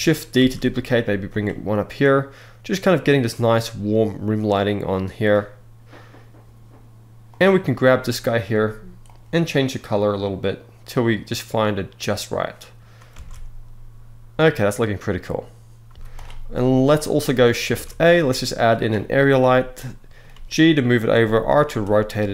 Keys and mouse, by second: 0.0 shift+d, 0.9 click, 6.9 click, 8.7 click, 12.9 alt+a, 15.6 z, 16.8 middle drag, 17.4 shift+a, 19.4 middle click, 20.0 g, 20.6 click, 20.9 middle click, 21.3 r.